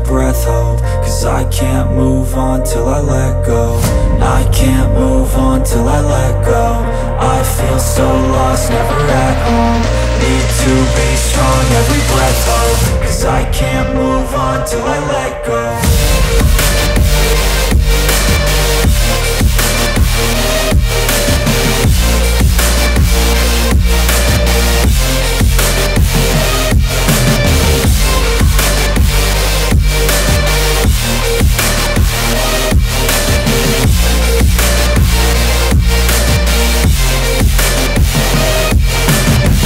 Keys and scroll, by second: 7.8 space, 12.9 space, 13.3 space, 17.2-18.0 typing, 20.7-22.5 typing, 26.5 space, 27.1 space, 27.6 space, 27.7 space, 30.9 space, 38.1 ctrl+space, 39.4-39.6 typing.